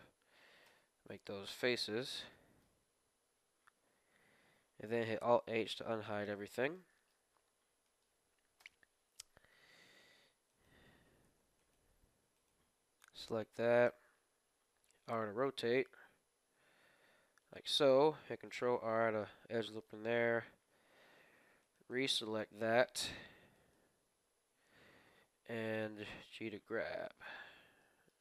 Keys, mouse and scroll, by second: 0.6 f, 0.7 f, 1.4 a, 1.9-3.8 middle drag, 4.9 alt+h, 5.5 middle click, 5.8 click, 5.9 middle click, 6.1-7.9 middle drag, 8.6 KP_1, 9.9-11.2 middle drag, 10.4 right click, 11.0 z, 13.4 z, 13.6 middle click, 14.8 r, 15.4 click, 17.6 r, 18.1 ctrl+r, 20.0 middle click, 20.7 z, 21.6 right click, 22.0-24.3 right drag, 24.1 z, 24.3 middle click, 24.4 right click, 25.2 g, 27.2 Tab, 27.4 middle click, 27.6 middle click, 27.8-28.2 middle drag.